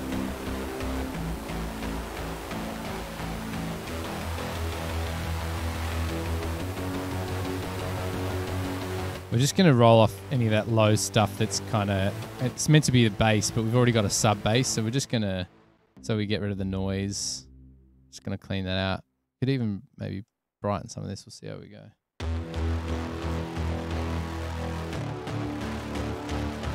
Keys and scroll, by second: 15.8 space, 16.0 space, 21.9 super+=.